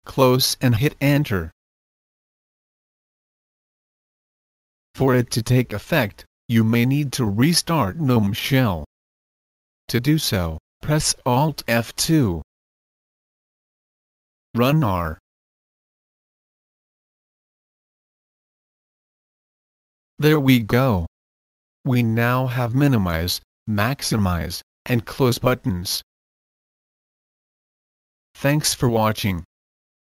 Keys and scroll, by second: 0.0-1.4 typing, 1.0 Return, 11.0 alt+F2, 14.2 typing, 16.4 Return, 16.4 r.